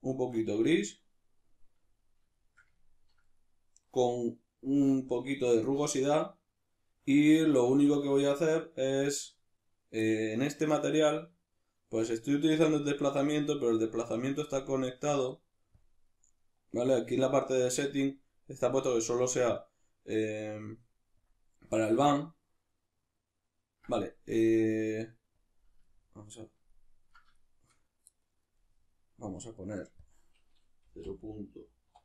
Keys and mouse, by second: 2.0-15.8 middle drag, 15.8 click, 16.1-18.9 middle drag, 18.9-25.4 drag, 25.9-30.0 ctrl+middle drag, 30.0-32.0 drag.